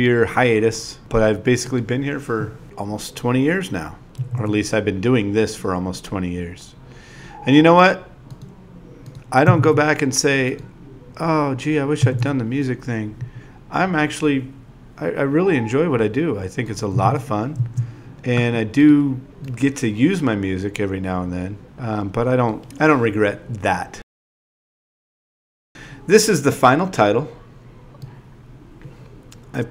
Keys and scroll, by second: 3.6 z, 7.2-8.4 typing, 11.2-13.1 typing, 25.6 n.